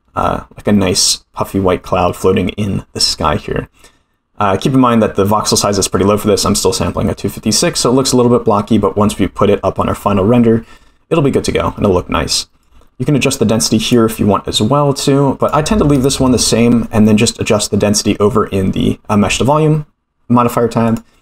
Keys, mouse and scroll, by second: 0.2-1.8 middle drag, 3.0-3.9 middle drag, 3.9 scroll up 1, 7.7 middle drag, 12.6-13.9 drag, 15.4-16.8 drag, 20.8 click.